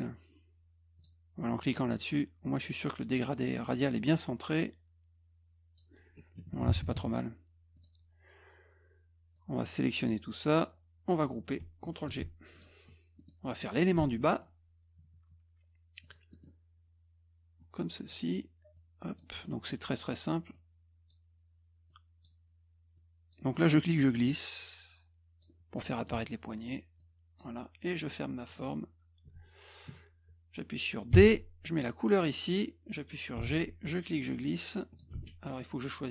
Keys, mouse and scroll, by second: 1.0 click, 1.9 click, 3.3-3.7 scroll up 6, 3.7 middle click, 4.6-5.8 drag, 6.1 F1, 7.8 click, 9.4-10.6 drag, 12.1 ctrl+g, 12.6 click, 13.2 middle click, 16.0 click, 16.3 middle click, 17.6 click, 18.8 click, 19.5 middle click, 20.5 click, 21.9 click, 23.0 click, 23.5 middle click, 24.6 click, 25.8 middle click, 27.0 click, 28.5 click, 32.2 click, 34.0 ctrl+click, 35.1 ctrl+z.